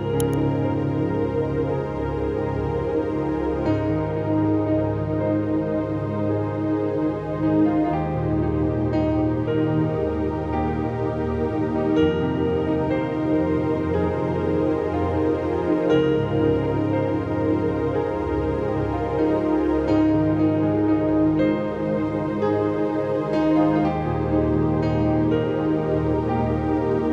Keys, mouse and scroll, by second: 0.6 click, 4.1 click, 6.5-9.1 drag, 12.1 click, 12.1 click, 13.2 click, 14.5-15.4 scroll down 1, 16.5 scroll down 1, 16.9 shift+click, 17.6 ctrl+g, 18.3 click, 18.6 shift+click, 19.2-21.7 shift+drag, 21.7 Caps_Lock, 21.9 shift+click, 23.2 ctrl+t, 23.5-24.8 drag, 24.8 Return, 25.8 shift+click, 26.2 Down.